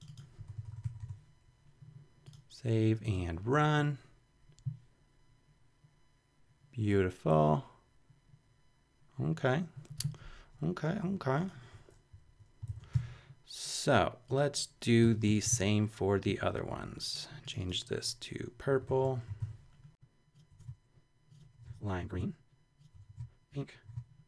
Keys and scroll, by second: 12.1 shift+Up, 12.6 shift+super+Left, 12.9 shift+super+c, 13.9 super+c, 15.0 Return, 15.2 BackSpace, 15.6 super+v, 18.4-24.2 typing, 20.4 Return, 20.6 super+v, 22.8 Return, 23.0 super+BackSpace, 23.1 super+v.